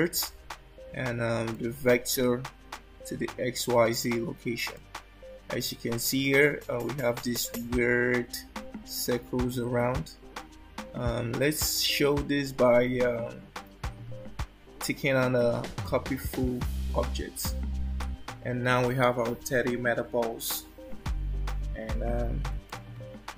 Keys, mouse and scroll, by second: 1.6 click, 3.8 click, 4.8 click, 6.2-6.6 scroll down 3, 16.0 click, 22.8 alt+middle click.